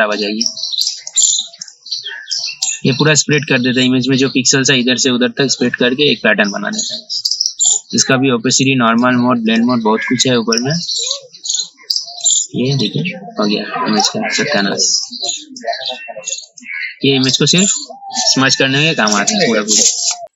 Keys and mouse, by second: 5.9-14.9 drag.